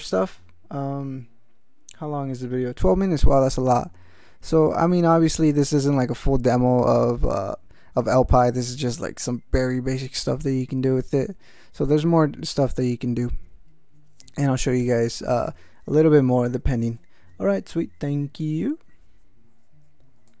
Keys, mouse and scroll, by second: 4.7 ctrl+p, 20.3 click.